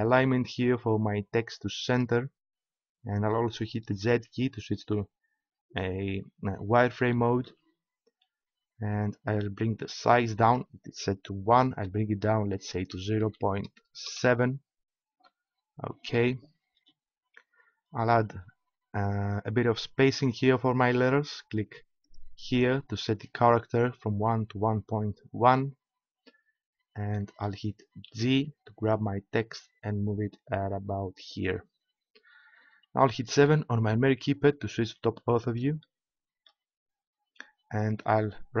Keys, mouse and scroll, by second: 1.9-3.7 drag, 4.2 z, 7.3-10.1 drag, 10.4-12.7 drag, 22.0-23.4 drag, 23.4 right click, 23.8 click, 26.1-27.4 drag, 28.1 g, 31.4-33.5 drag, 33.5 KP_7, 35.8-38.6 middle drag.